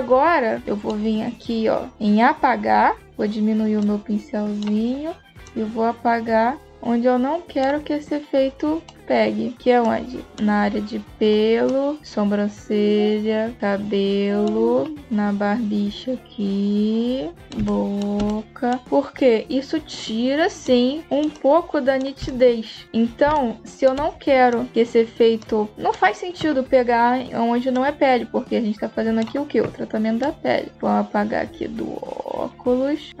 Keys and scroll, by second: 15.0 space, 17.5 space, 22.0 space.